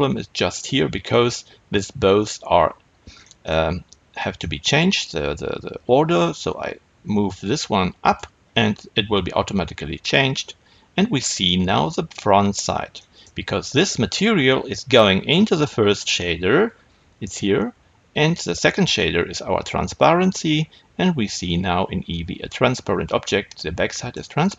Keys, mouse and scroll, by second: 6.3-10.4 drag, 10.4-24.5 middle drag.